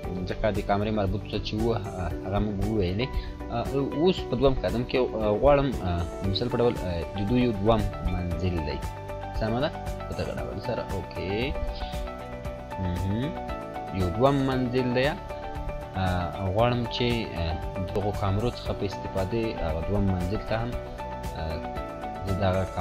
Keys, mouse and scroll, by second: 0.9-1.5 drag, 8.0 click, 14.0 click, 18.3 click.